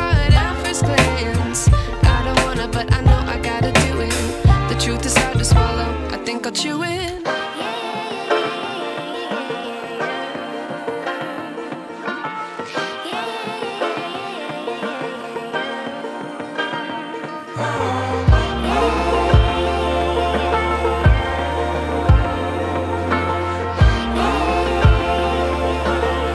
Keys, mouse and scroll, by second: 2.4 ctrl+d, 2.7 v, 3.5-5.1 drag, 6.9 click, 7.8 ctrl+t, 9.3-10.9 drag, 13.5-15.4 click, 17.4-18.6 alt+drag, 20.5-20.8 click, 21.9 ctrl+t, 23.2-24.1 drag.